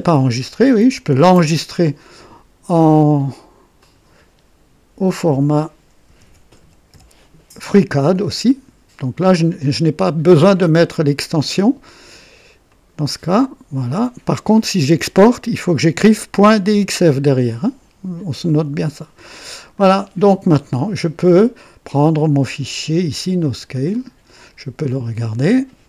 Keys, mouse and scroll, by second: 1.2 ctrl+s, 3.8 click, 4.9-8.4 typing, 12.7 click, 18.5 click, 19.7 click, 23.7 click.